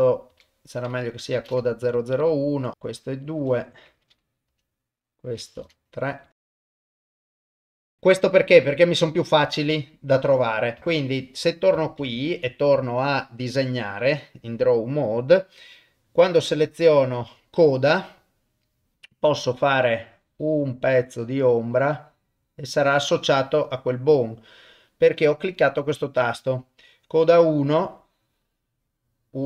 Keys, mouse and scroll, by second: 0.3 F2, 2.2 click, 2.5 F2, 3.2 click, 3.4 F2, 6.2 click, 6.3 F2, 7.5 click, 10.8 ctrl+Tab, 10.9 click, 12.0 ctrl+Tab, 15.0 middle click, 16.1 middle click, 19.8-22.8 drag, 24.1 click, 27.8-29.4 drag.